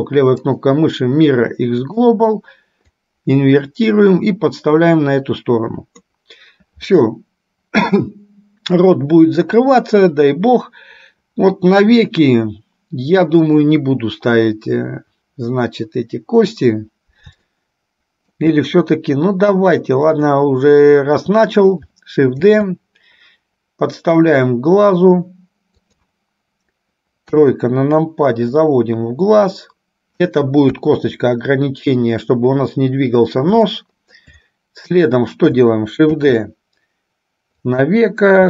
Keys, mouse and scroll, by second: 0.6-2.2 right drag, 3.1-6.2 drag, 17.6-18.6 shift+middle drag, 20.1 click, 22.6 shift+d, 27.4 KP_3, 28.7-30.4 drag, 30.9 KP_1, 33.9 shift+middle click, 36.4 shift+d.